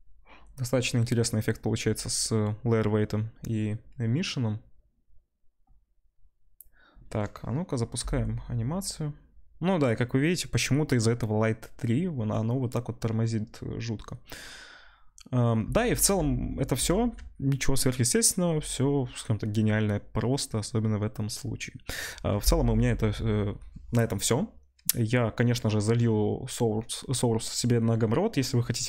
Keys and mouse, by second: 5.8 middle click, 8.9 space, 9.1-10.5 middle drag, 15.6 space, 15.9 middle click, 16.8 space, 17.0 click, 17.2-28.8 middle drag.